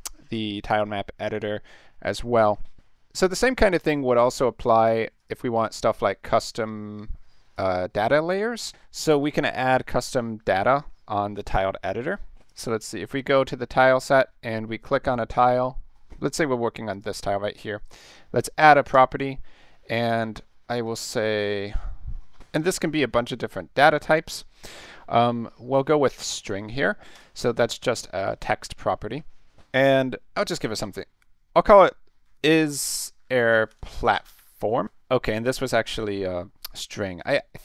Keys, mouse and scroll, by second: 0.2 ctrl+s, 5.2 click, 7.5 click, 12.4 click, 13.2 click, 14.4-14.9 middle drag, 15.6-15.9 middle drag, 16.0 scroll up 2, 16.9 click, 17.9 right click, 18.9 click, 20.7 click, 22.6 click, 26.3 click, 27.1 click, 32.1-34.8 typing, 35.3 click, 35.6 click, 37.2 click.